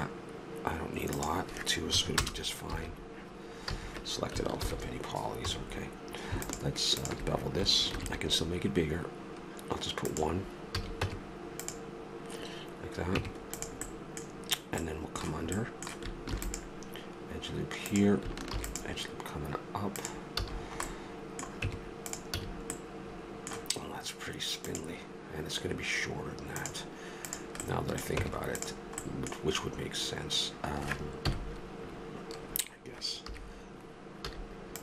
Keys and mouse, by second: 1.1-3.0 drag, 2.7 a, 3.7 a, 4.6 ctrl+n, 5.4 a, 5.7 middle click, 7.9 ctrl+b, 10.7 a, 11.0 Tab, 14.0 Tab, 16.3 ctrl+r, 19.7 ctrl+r, 20.4 a, 21.7 Tab, 22.4 a, 27.2 right click, 27.6 middle click, 28.1 Tab, 31.3 KP_1, 33.3 KP_3, 34.3 z.